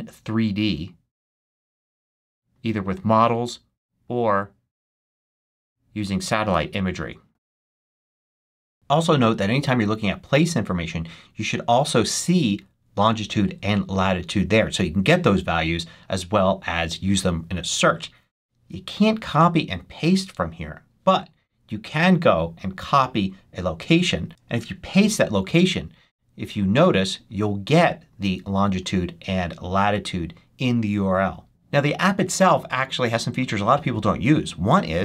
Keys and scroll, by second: 25.0 super+v.